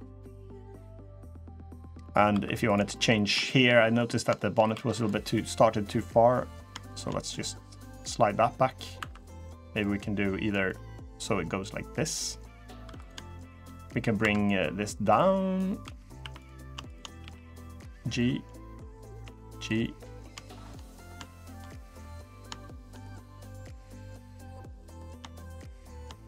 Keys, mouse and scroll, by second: 0.2 middle click, 1.1 middle click, 1.8 middle click, 2.0 3, 2.4 click, 2.7 middle click, 2.9 scroll up 1, 3.2 shift+middle click, 3.5 middle click, 3.8-4.2 scroll up 2, 4.1 shift+middle click, 4.4 3, 4.7 click, 5.7 click, 6.3 click, 6.6 shift+click, 6.8 shift+click, 7.1 click, 8.7 2, 9.1 click, 9.5 click, 9.6 shift+click, 10.4 middle click, 11.9 middle click, 12.6 3, 12.7 click, 13.1 shift+click, 14.0 2, 14.1 click, 14.6 click, 15.5 shift+click, 15.6 3, 16.0 1, 16.1 click, 16.6 shift+click, 16.7 shift+click, 17.0 g, 17.9 middle click, 18.7 click, 18.7 click, 18.8 shift+click, 19.0 g, 19.6 middle click, 20.2 shift+middle click, 20.5 middle click, 21.0 shift+middle click, 21.4 scroll up 3, 21.7 middle click, 22.3 shift+middle click, 22.8-23.3 scroll down 2, 23.1 middle click, 24.1 click, 24.8 click, 25.2 shift+click, 25.4 shift+click, 25.5 click, 26.0 click.